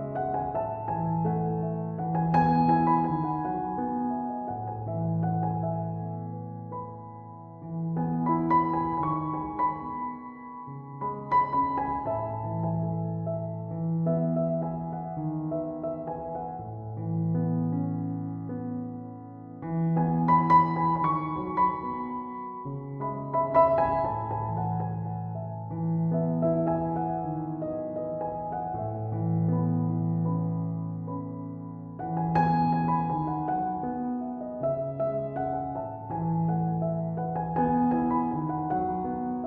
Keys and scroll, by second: 25.3 BackSpace.